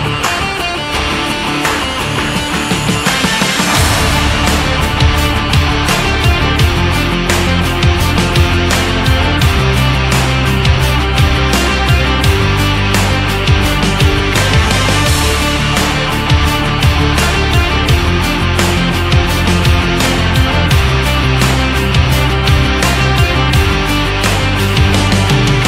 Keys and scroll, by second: 1.0 ctrl+-, 12.7 shift+x.